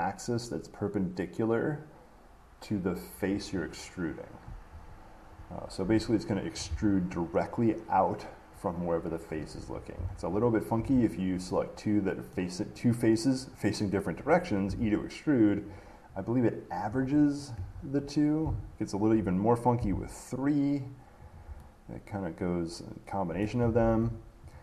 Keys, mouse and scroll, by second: 6.0 Escape, 10.6 shift+click, 11.4 middle click, 11.5 middle click, 12.5 middle click, 17.8 Escape, 18.9 shift+click, 21.5 click, 23.6 middle click, 24.0 ctrl+z.